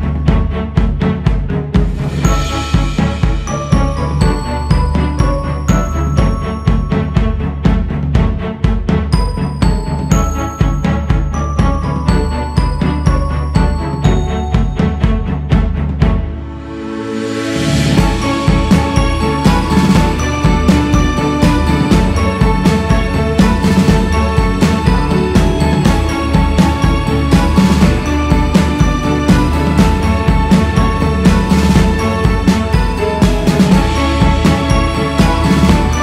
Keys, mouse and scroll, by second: 0.8-1.2 scroll up 3, 1.2 shift+s, 1.7 f, 2.7-6.3 drag, 6.3-7.2 scroll down 2, 7.2 click, 7.8-8.8 scroll up 1, 8.8 scroll up 1, 8.9-10.2 scroll down 1, 10.7 shift+h, 12.9 h, 16.1 click, 18.3 shift+h, 20.6 shift+h, 22.4 shift+h, 23.8-24.8 scroll up 3, 25.0-28.6 drag, 28.6 scroll down 1, 28.9-30.6 drag, 30.6 shift+c, 32.5 click, 33.6 shift+c, 34.0 f.